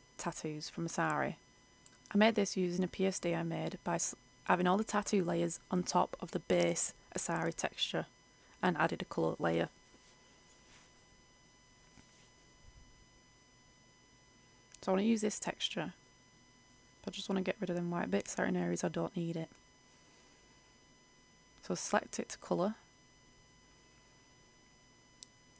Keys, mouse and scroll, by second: 1.1-2.6 scroll up 1, 2.6-25.5 drag.